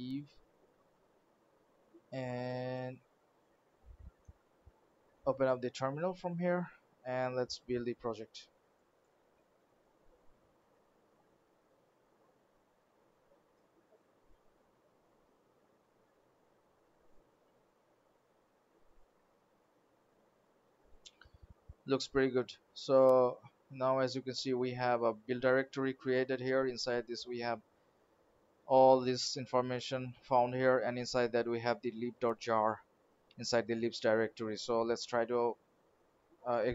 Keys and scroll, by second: 3.2 alt+d, 35.7 alt+d.